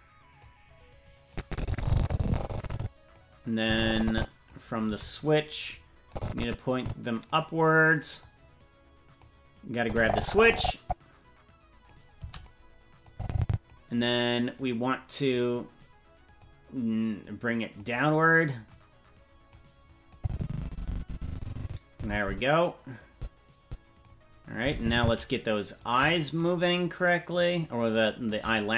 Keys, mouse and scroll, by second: 1.3-3.1 drag, 3.6 click, 4.8 i, 6.1-7.3 drag, 8.2-9.2 drag, 9.8-11.9 drag, 12.1 i, 13.1 click, 14.6-15.6 drag, 16.4-17.8 drag, 18.7 click, 20.1-24.1 drag, 24.6 click, 26.0 right click, 26.6 shift+right click.